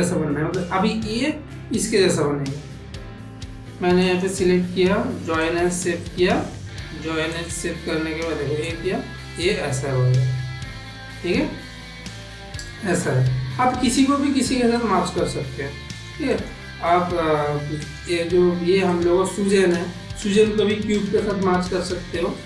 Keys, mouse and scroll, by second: 4.0-5.6 drag, 7.2 click, 8.6-11.9 drag, 12.5 middle click, 13.7 g, 15.8 click, 16.2 click, 17.8 click, 18.2 g, 19.8 shift+a.